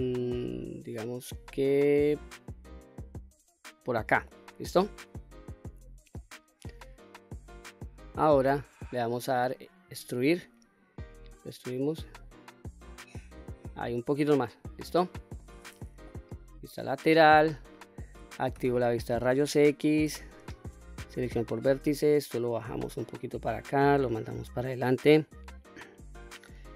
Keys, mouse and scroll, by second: 3.8 click, 4.3-6.1 middle drag, 6.5-8.8 middle drag, 9.9 e, 14.2 click, 14.7 middle click, 16.0 KP_3, 16.8 scroll up 2, 17.6 shift+middle click, 18.5 q, 20.1 1, 20.9 click, 22.2-23.4 drag, 24.1-25.4 drag.